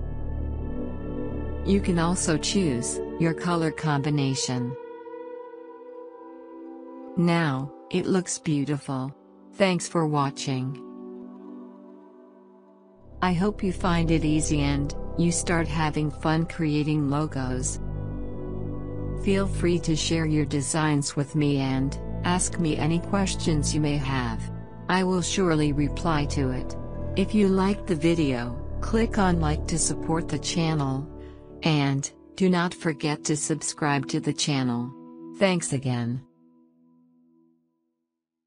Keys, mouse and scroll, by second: 2.1 click.